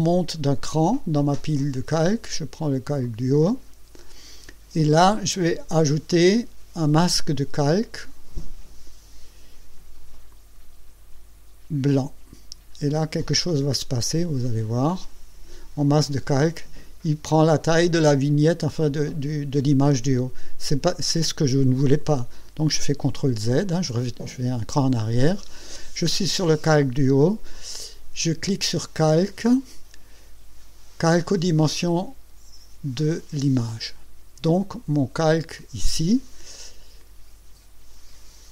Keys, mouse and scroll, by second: 3.0 click, 10.3 click, 13.4 click, 15.0 click, 23.7 ctrl+z, 29.0 click, 33.7 click.